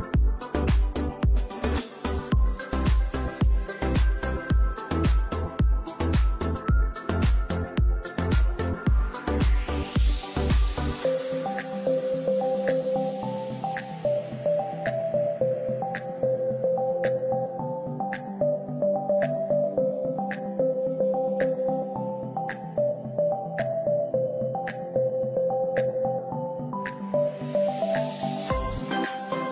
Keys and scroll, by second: 0.1 Escape, 2.3 F2, 6.4 space, 7.0 ctrl+q, 7.5 F2, 13.4 space, 13.9 F3, 18.8 ctrl+z, 21.1 space, 23.6 4, 23.7 5, 23.9 Return, 28.1 F2.